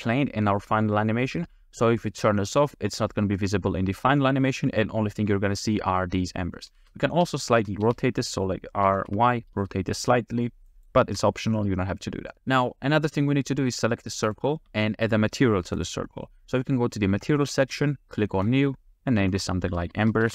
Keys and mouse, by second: 6.6 click, 6.8 space, 7.6 r, 7.8 x, 8.3 click, 8.9 r, 9.1 y, 10.7 click, 11.1 space, 12.3 a, 14.3 click, 14.7 g, 18.6-20.3 drag.